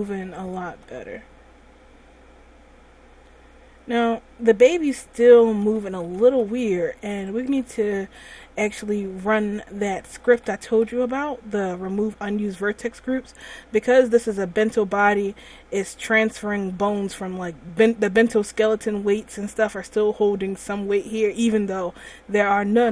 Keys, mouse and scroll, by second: 0.8 right click, 1.0 r, 5.8 a, 6.1 a, 6.5 alt+r, 7.7 right click, 8.3 r, 10.4 a, 10.6 a, 11.0 alt+r, 13.5 click.